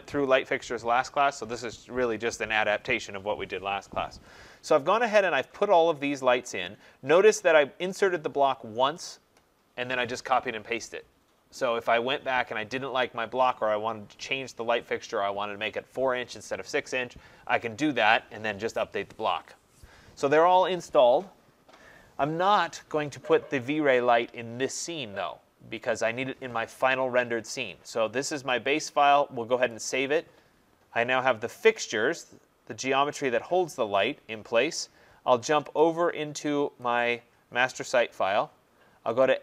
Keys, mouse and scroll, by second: 28.5 click, 29.9 click, 35.8 click, 37.2 click, 39.2 click.